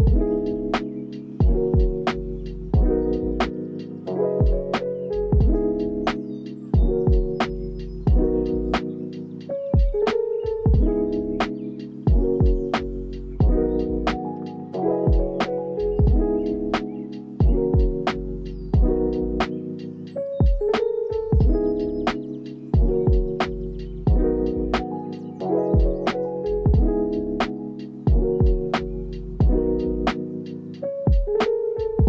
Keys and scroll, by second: 0.7 space, 3.7 space, 4.1 ctrl+s, 6.0 Up, 6.6 Down, 8.1 space, 11.9 space, 12.2 ctrl+s, 14.7 shift+r, 18.0 ctrl+s, 27.5 ctrl+s, 31.8 ctrl+s.